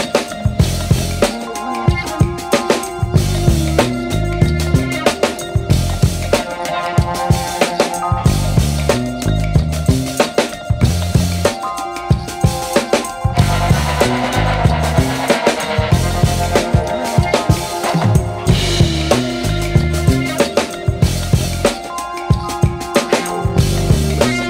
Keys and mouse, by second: 0.4 shift+middle click, 1.6 shift+middle click, 2.3 Tab, 2.7 alt+z, 2.9 right click, 3.2 c, 4.0 g, 5.4 right click, 5.7 c, 6.3 g, 7.4 right click, 7.6 g, 8.6 c, 12.2 shift+middle click, 12.8 e, 14.1 r, 15.0 g, 15.5 w, 19.6 r, 20.5 g, 21.2 w, 23.8 s.